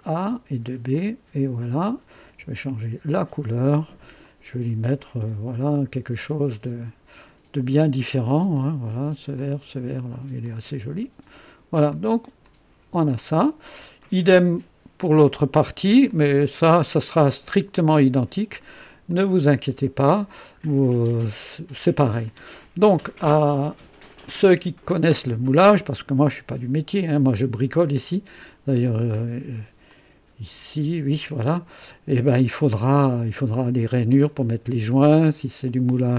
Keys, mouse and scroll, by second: 0.2 space, 0.9 click, 1.8 click, 2.8 ctrl+d, 4.2 click, 8.5 click, 9.3 click, 10.4 click, 11.3 click, 11.9 click, 12.4-13.9 drag, 14.0 click, 16.0-18.8 drag, 19.1-20.4 drag, 20.5 scroll up 1, 21.1 right click, 22.2-23.1 drag, 23.3-27.8 drag, 28.0 click, 28.7 click, 29.9-32.5 drag, 32.6 click, 34.9-36.0 drag.